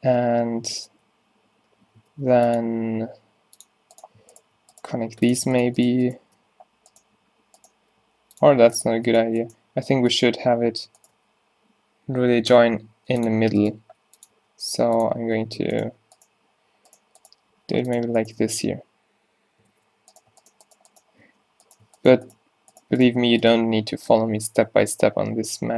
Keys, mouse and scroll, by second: 2.2 ctrl+r, 4.0 click, 5.0 e, 6.4 f, 7.8 g, 10.5 x, 11.2 shift+x, 12.6 x, 13.7 g, 14.4 e, 17.6 g, 18.4 f, 19.8 alt+w, 20.6 shift+Tab, 21.3 f, 23.7 f, 24.0 z, 24.8 z.